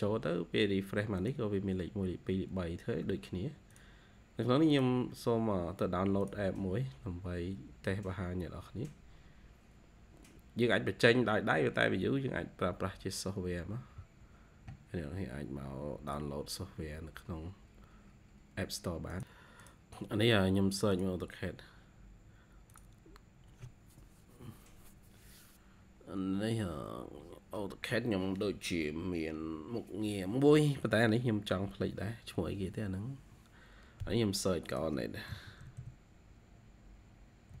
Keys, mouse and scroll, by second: 26.3-28.6 scroll down 32, 28.6-32.0 scroll down 78, 32.0-34.3 scroll up 88, 35.0-36.2 typing, 35.0 scroll up 1, 37.4 typing.